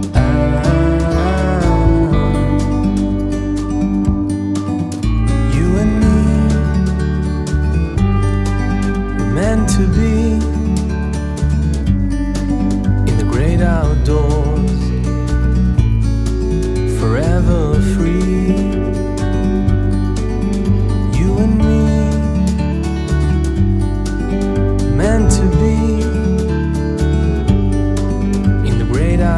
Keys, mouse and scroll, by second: 0.4 click, 3.9 click, 6.8 click, 11.2 click, 13.8 click, 16.3 click, 16.6 right click, 17.1 click, 18.1 right click, 19.0 click, 20.0 right click, 20.4 click, 25.7 click, 28.6 click.